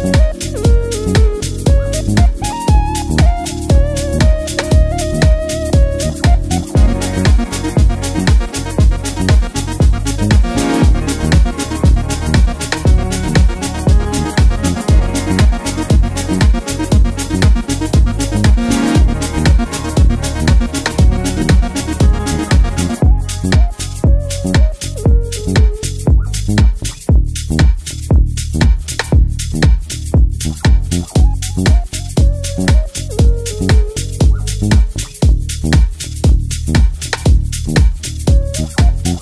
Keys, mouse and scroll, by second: 7.2 z, 7.8-9.4 drag, 29.2-39.2 drag.